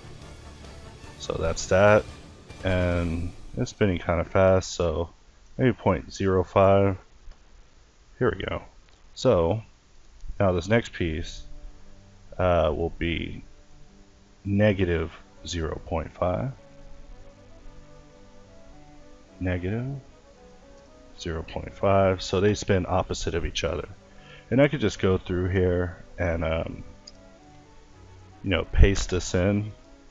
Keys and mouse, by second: 0.0 Return, 0.9 middle click, 1.3 alt+a, 2.2 Escape, 5.9 alt+a, 7.5 middle click, 7.8 Escape, 8.8-9.9 middle drag, 20.8 alt+a, 22.0 Escape, 27.1 alt+a.